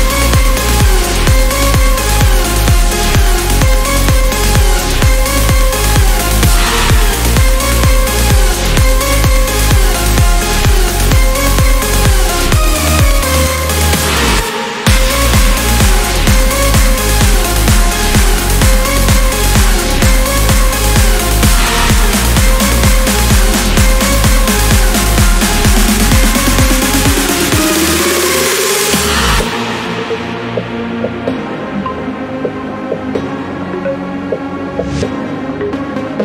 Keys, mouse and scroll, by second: 0.2 click, 1.4 click, 2.6 5, 3.0 0, 4.1-5.6 drag, 6.0 click, 7.3 click, 8.3 click, 8.7 click, 9.5 0, 10.2 scroll down 1, 10.7 scroll up 1, 12.0 click, 13.5 click, 14.9 click, 18.0 click, 18.6 click, 19.7 click, 20.8 Return, 22.3 click, 23.3 click, 24.3 click, 25.4 Delete, 26.8 scroll down 1, 27.2 scroll up 1, 27.9 click, 35.1 click, 36.1 Delete.